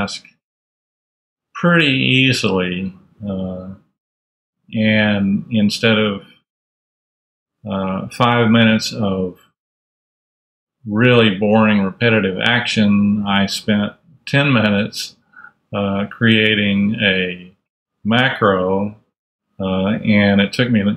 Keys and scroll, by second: 0.0 super+Left, 0.9 super+,.